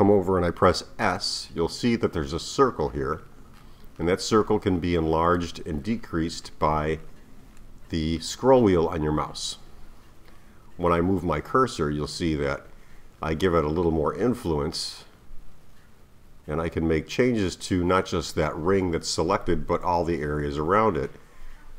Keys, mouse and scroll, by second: 1.0 s.